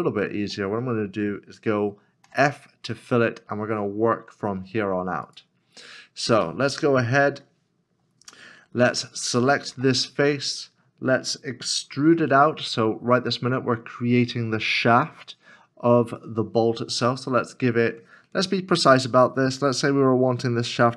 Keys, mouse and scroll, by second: 2.3 f, 3.0 scroll up 1, 6.5 middle click, 9.7 3, 10.5 scroll down 1, 12.1 e.